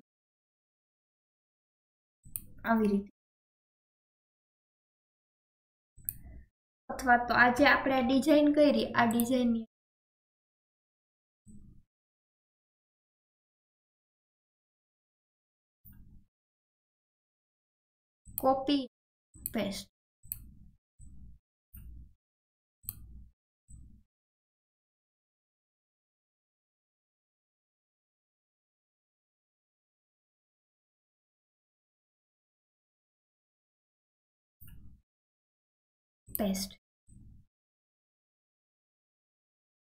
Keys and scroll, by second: 8.0 ctrl+z.